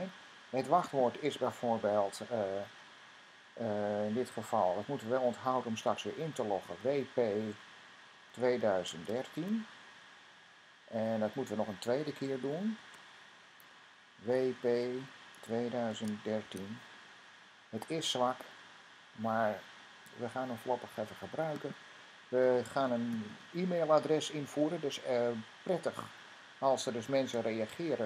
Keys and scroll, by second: 22.1-25.0 typing, 26.9 typing.